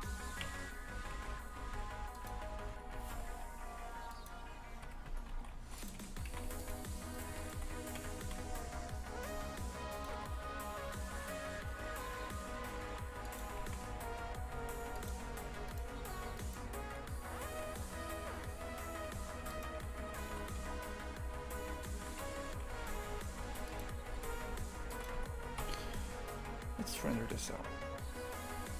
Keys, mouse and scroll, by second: 0.4 KP_Divide, 1.1 shift+f, 2.7 Tab, 2.9 g, 4.8 KP_Divide, 5.0 Tab, 5.3 shift+f, 7.1 right click, 7.3 shift+right click, 7.9 KP_Divide, 8.2 shift+f, 10.1 g, 13.6 shift+f, 15.6 right click, 16.3-17.4 shift+right drag, 17.4 g, 19.5 shift+right click, 20.1 g, 22.5 shift+f, 24.1 g, 25.1 Tab.